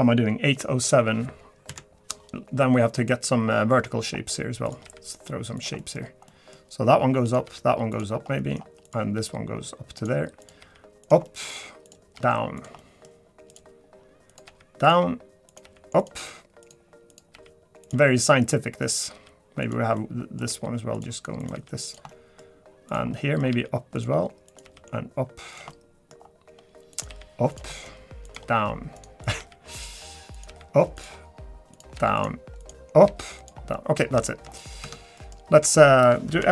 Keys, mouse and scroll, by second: 0.2 scroll down 1, 0.5 middle click, 1.7 KP_Decimal, 2.3-3.1 scroll down 8, 3.1 middle click, 3.3 scroll down 2, 3.8 middle click, 4.7 click, 4.8 g, 5.8 middle click, 6.3 middle click, 7.3 click, 7.4 g, 8.1 scroll down 3, 8.4 middle click, 8.8 click, 9.1 g, 10.4 click, 10.6 g, 11.2 middle click, 11.8 click, 12.1 g, 12.8 middle click, 13.5 click, 14.3 click, 14.4 g, 15.5 click, 15.6 g, 16.6 click, 17.1 click, 17.3 g, 18.1 middle click, 18.8 click, 19.1 g, 20.0 middle click, 20.5 g, 21.4 click, 21.5 g, 22.1 middle click, 22.9 click, 23.1 middle click, 23.5 g, 24.5 click, 24.6 g, 25.7 middle click, 26.2-26.5 scroll up 3, 26.9 click, 27.1 g, 27.8 middle click, 28.2 click, 28.3 g, 29.2 click, 29.4 g, 30.3 click, 30.5 g, 31.7 click, 31.9 g, 32.6 click, 33.1 g, 33.7 middle click, 34.2 shift+middle click, 34.6 middle click, 34.8 Tab, 35.2 middle click, 36.4 F3.